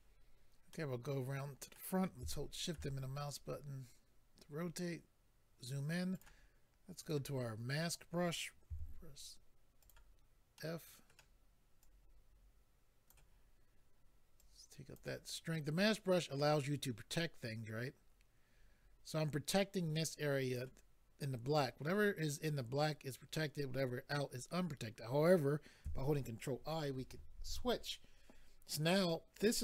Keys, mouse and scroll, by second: 0.7 middle click, 2.3 shift+middle click, 2.9-3.4 scroll up 4, 6.2 click, 7.0 click, 9.8 click, 9.8 f, 9.9 click, 10.5 middle click, 11.8 click, 14.4 click, 16.7 click, 27.4 ctrl+i.